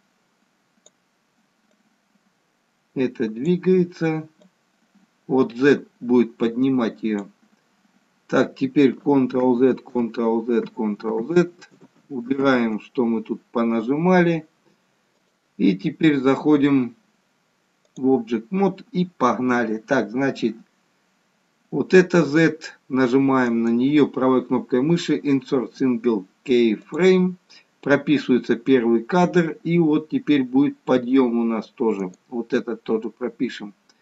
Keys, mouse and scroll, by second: 2.0 click, 4.4 click, 9.3 ctrl+z, 9.9 ctrl+z, 10.6 ctrl+z, 11.2 ctrl+z, 11.8 ctrl+z, 12.4 ctrl+z, 15.2 click, 23.5 right click, 32.1 right click.